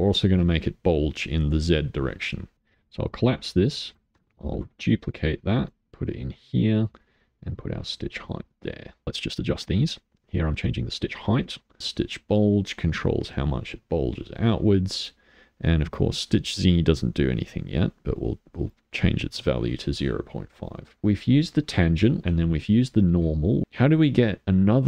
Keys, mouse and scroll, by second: 0.3-2.6 middle drag, 2.6 click, 3.1 click, 4.5 shift+d, 7.0-9.0 drag, 9.7-11.7 drag, 11.8-18.7 drag, 20.6 middle click, 21.0-21.3 scroll up 11, 21.3-22.7 middle drag.